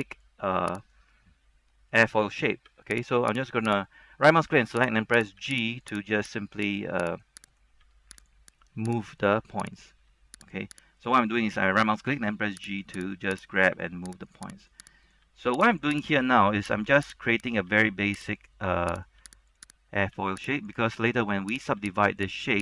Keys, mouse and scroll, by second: 0.9 right click, 2.8 g, 3.2 click, 3.5 right click, 4.4 g, 5.0 click, 5.3 right click, 5.5 g, 5.9 click, 6.2 right click, 6.4 g, 6.8 click, 7.2 right click, 8.0 g, 8.3 click, 8.7 right click, 8.9 g, 9.3 click, 9.9 right click, 10.2 g, 10.6 click, 11.1 right click, 12.2 g, 12.8 click, 13.2 right click, 14.4 click, 14.7 right click, 15.4 g, 15.8 click, 16.4 right click, 16.7 g, 17.2 click, 17.5 right click, 17.8 g, 18.5 click, 19.1 right click, 19.3-20.2 typing, 19.7 click, 20.1 right click, 20.7 click, 21.7 right click, 21.9 typing, 22.3 click.